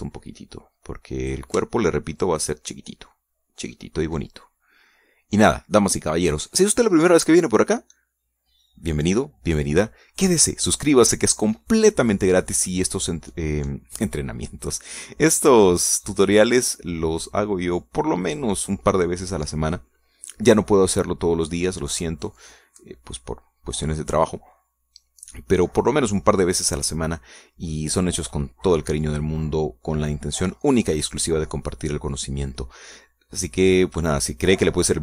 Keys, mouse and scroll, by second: 0.8-2.5 drag, 2.8-3.5 shift+middle drag, 4.2 scroll down 1, 4.7 scroll up 1, 5.4-7.5 middle drag.